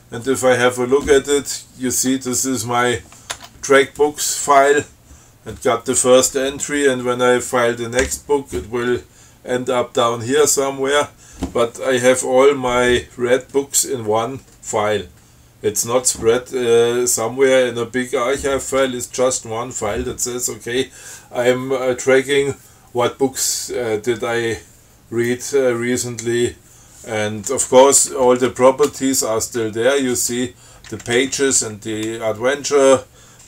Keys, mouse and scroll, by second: 3.6 Tab, 28.4 Down, 29.1 Tab, 29.9 Down, 31.1 Up, 31.4 Down.